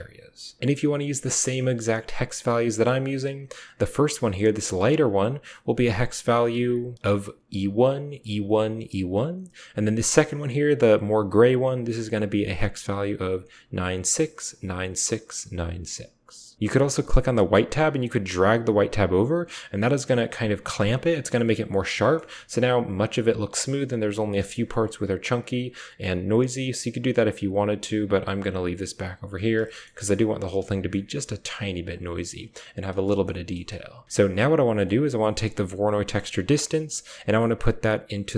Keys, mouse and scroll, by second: 0.6 ctrl+v, 2.2 click, 2.6 typing, 3.4 click, 9.8 click, 11.5 click, 17.2-17.9 drag, 17.9-20.5 middle drag, 20.5 click, 21.8 shift+middle drag, 24.2 shift+middle drag, 24.3 shift+click, 24.4 shift+middle click, 27.1-28.6 drag, 29.5 shift+middle click, 30.5 shift+middle drag, 31.7 click, 33.1 click, 33.4 click, 33.5 typing, 34.6 click, 34.7 typing, 35.9 click, 37.0-38.3 drag.